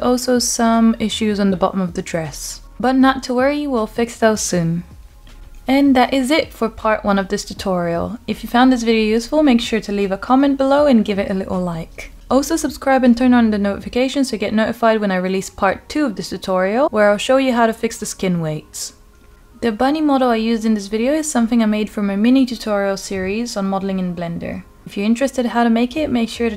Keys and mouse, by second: 0.0 r, 5.5 r, 10.1 Escape, 11.4 r, 11.9 x, 12.8 z, 17.3 g, 18.9 drag, 19.7 click, 20.3 g, 22.3 drag, 22.7 click, 23.4 r, 25.7 click, 26.5 r.